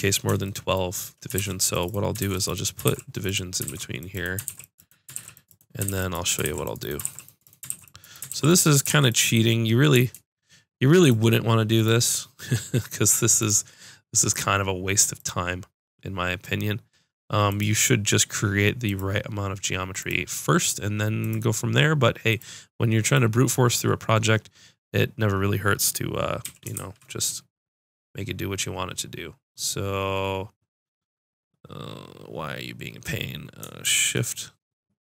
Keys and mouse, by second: 1.4 ctrl+r, 2.3 ctrl+r, 2.8 ctrl+r, 3.6 ctrl+r, 4.5 ctrl+r, 5.1 ctrl+r, 5.9 ctrl+r, 6.4 ctrl+r, 7.0 ctrl+r, 7.7 ctrl+r, 8.3 ctrl+r, 8.9 ctrl+r, 13.5-16.7 drag, 26.4 s.